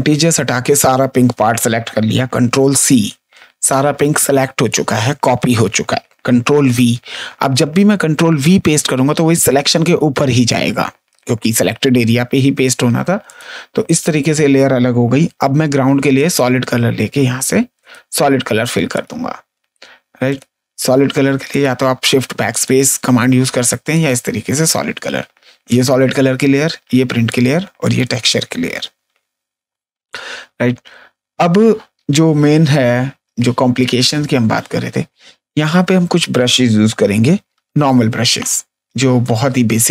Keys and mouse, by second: 2.4 ctrl+c, 8.7 ctrl+v, 13.2 click, 15.3 g, 16.1 alt+click, 17.7 click, 18.9 click, 20.2 click, 21.4 click, 23.9 click, 25.6 click, 27.2 click, 29.9 space, 30.6 click, 31.5 click, 33.0 click, 34.1 click, 35.5 ctrl+space, 35.7 click, 37.5 b, 39.0 click.